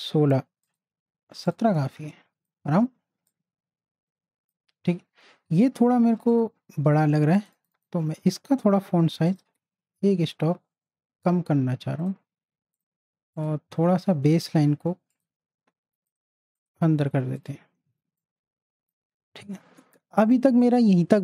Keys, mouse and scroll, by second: 0.7 click, 1.9 z, 2.1-5.6 drag, 5.6 t, 6.3 click, 7.4 click, 12.0 click, 16.5 click, 17.9 z, 18.2-21.2 drag.